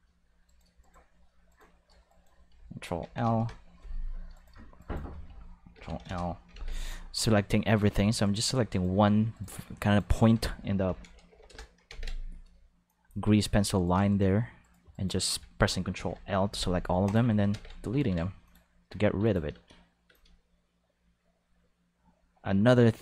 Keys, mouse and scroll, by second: 0.4 right click, 0.8 shift+right click, 1.5-2.2 right drag, 3.0 ctrl+l, 3.2 x, 5.7 ctrl+l, 5.9 x, 6.5 ctrl+s, 7.2-7.7 drag, 8.2 right click, 10.8 ctrl+l, 11.2 x, 11.4 Return, 11.8 ctrl+s, 12.8 click, 13.7 right click, 14.1-14.7 shift+right drag, 15.9 ctrl+l, 16.5 x, 17.0 click, 17.5 ctrl+s, 18.4 click, 19.2 click, 19.5 space, 20.0 space, 20.1-23.0 drag.